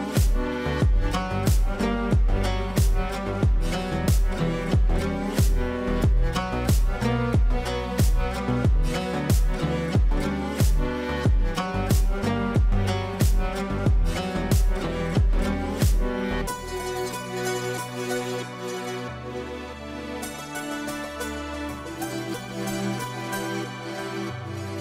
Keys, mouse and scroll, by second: 0.1-1.1 typing, 1.1 ctrl+space, 1.9 click, 7.2-10.1 drag, 10.1 F2, 10.6 click, 10.6-11.6 drag, 15.3-16.3 drag, 18.5 right click, 19.1 click, 20.4 ctrl+a, 21.7 shift+7, 22.4 ctrl+space, 23.4-24.8 drag.